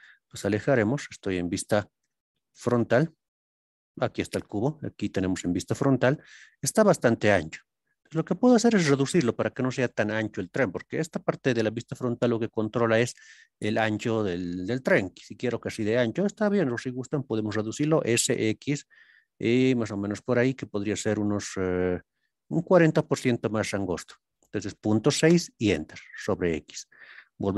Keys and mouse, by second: 2.0 KP_1, 22.4 KP_Decimal, 22.5 KP_6, 25.3 KP_Enter, 27.5 ctrl+KP_3.